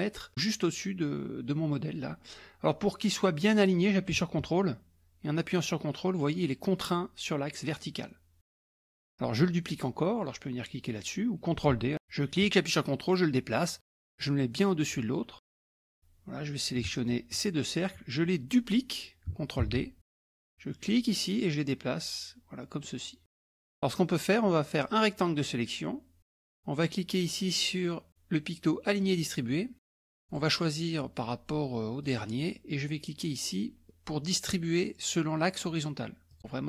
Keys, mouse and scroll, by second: 11.9 ctrl+d, 12.0-15.3 drag, 17.0 shift+click, 19.7 ctrl+d, 20.9-23.6 drag, 24.8-26.4 drag, 29.0 click, 30.2 click, 32.1 click, 36.3 click.